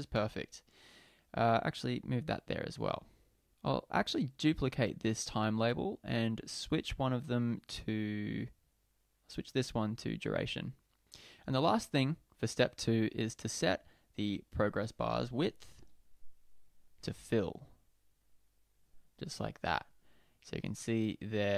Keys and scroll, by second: 1.7 Left, 4.2 super+d.